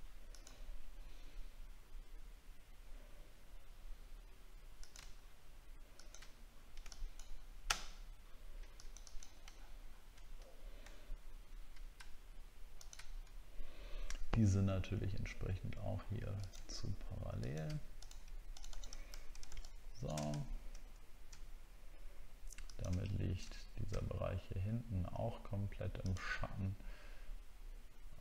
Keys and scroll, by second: 9.5 alt+scroll down 1, 10.9 alt+scroll up 1, 19.1 alt+scroll down 1, 20.3 alt+scroll up 3.